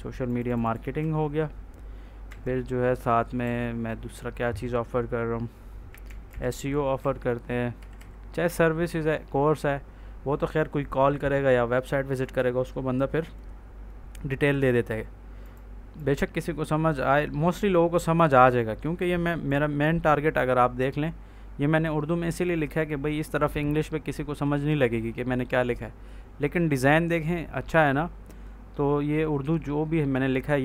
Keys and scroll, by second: 0.9 ctrl+s, 3.3 ctrl+a, 5.5-6.7 typing, 6.9 ctrl+s, 7.7 Right, 12.3 ctrl+s.